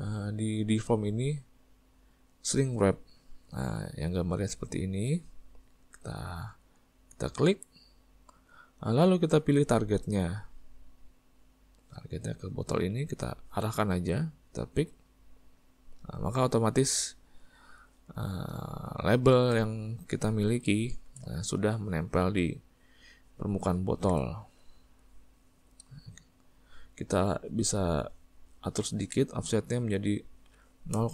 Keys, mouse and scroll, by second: 7.7 click, 12.0 click, 16.1-31.1 middle drag.